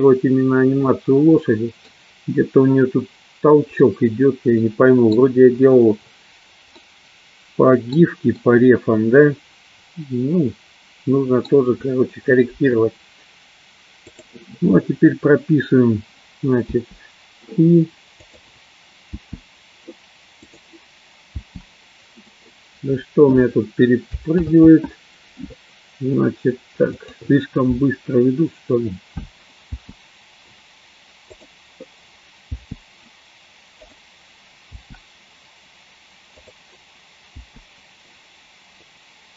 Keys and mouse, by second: 1.0-2.0 middle drag, 4.0-5.2 middle drag, 7.0-8.1 middle drag, 8.5-11.6 middle drag, 14.6 click, 18.8 click, 19.6 i, 21.1 click, 25.1 ctrl+z, 27.5 click, 32.0 click, 34.5 click, 35.3 i, 37.0 click.